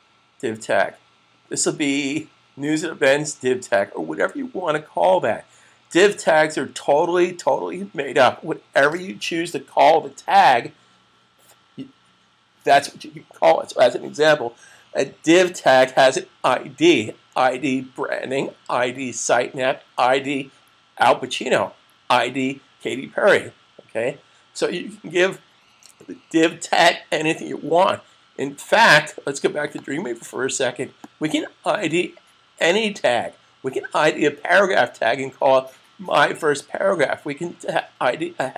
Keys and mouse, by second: 29.5 click.